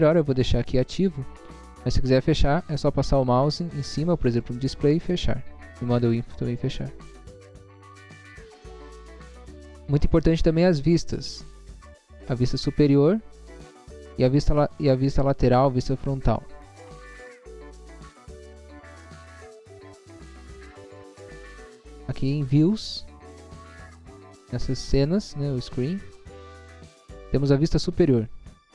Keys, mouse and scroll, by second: 0.2 scroll up 1, 4.7 click, 6.0 click, 6.2 click, 23.2 click.